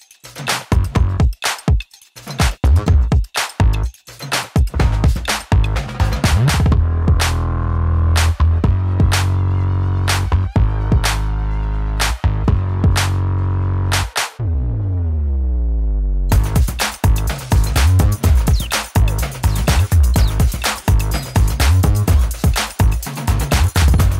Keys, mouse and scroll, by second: 1.7-5.2 shift+drag, 7.2 n, 7.8 right click, 8.3-14.5 drag, 19.3-20.8 typing, 23.3 typing, 23.6 click.